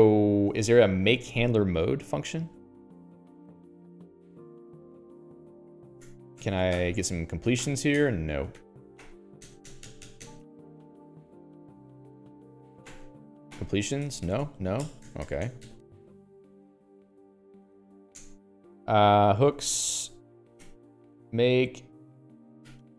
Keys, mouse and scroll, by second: 2.4 click, 3.1 ctrl+alt+j, 4.7 Return, 5.0-6.2 typing, 6.5 Tab, 7.2 ctrl+alt+i, 8.0 ctrl+alt+i, 8.4 BackSpace, 9.0 ctrl+alt+i, 9.4 ctrl+alt+i, 9.9-10.7 typing, 10.8 Escape, 11.7-13.1 typing, 13.3 ctrl+alt+i, 14.0 ctrl+alt+i, 14.4 Tab, 14.7 Tab, 15.2 BackSpace, 15.5 BackSpace, 16.6 Escape, 17.9 alt+x, 18.6 Return, 19.6-21.2 typing, 22.8-22.9 typing.